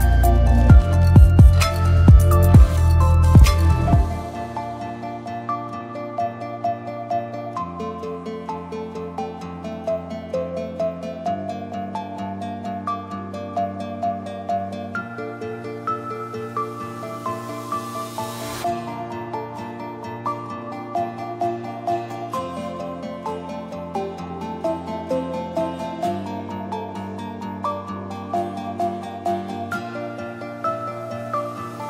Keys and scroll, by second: 5.8-7.8 typing, 12.5-13.4 typing, 16.8-17.7 typing, 29.7-31.6 typing.